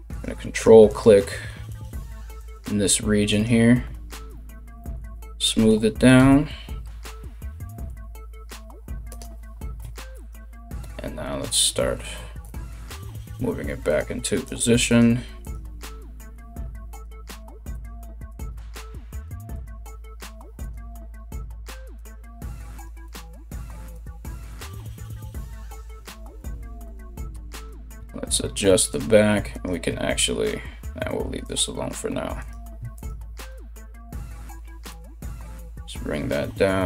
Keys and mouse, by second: 0.1 ctrl+right click, 0.5 ctrl+right click, 1.3 ctrl+right click, 2.0 ctrl+right click, 2.9 ctrl+right click, 3.9 alt+q, 4.7 z, 5.7 KP_3, 7.5 g, 9.4 1, 9.8 right click, 10.4 g, 12.7 g, 14.0 right click, 14.2 g, 15.0 right click, 15.1 g, 17.0 g, 17.9-23.3 middle drag, 17.9 right click, 18.1 g, 19.1 right click, 19.5 g, 20.9 right click, 21.0 g, 21.5 right click, 21.7 g, 22.3-24.2 right drag, 22.7 click, 23.3 g, 24.2-25.2 middle drag, 24.2 g, 25.2 right click, 25.4-36.8 middle drag, 25.4 g, 27.1 right click, 27.6 g, 29.1 right click, 31.0 right click, 32.0 right click, 32.5 ctrl+right click, 33.0 ctrl+right click, 33.7 g, 35.0 g.